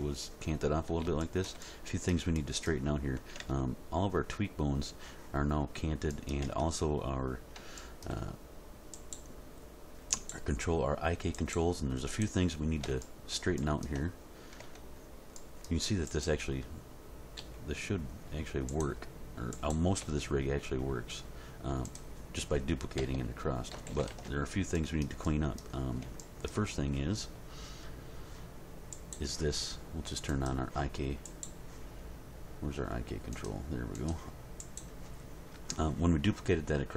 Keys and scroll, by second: 3.4 Tab, 6.5 Tab, 14.6 Tab, 17.4 r, 20.0 r, 23.0 a, 23.7 alt+r, 23.9 alt+g, 24.1 alt+s.